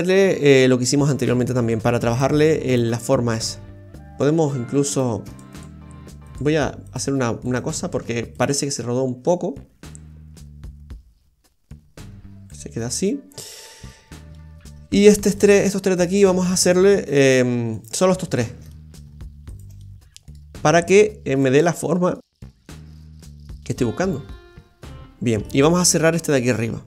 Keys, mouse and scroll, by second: 2.1 right click, 2.7 shift+right click, 3.0 middle click, 4.9 right click, 5.3 alt+shift+right click, 5.5 right click, 6.3 alt+shift+right click, 6.8 alt+shift+right click, 7.6 alt+shift+right click, 8.3 click, 13.9 scroll down 1, 14.3 middle click, 15.4 right click, 16.3 middle click, 17.2 right click, 17.7 shift+right click, 18.7 middle click, 19.5 shift+right click, 19.8 middle click, 21.4 click, 23.7 click, 25.2 middle click, 25.9 Tab, 26.4-26.7 scroll up 2.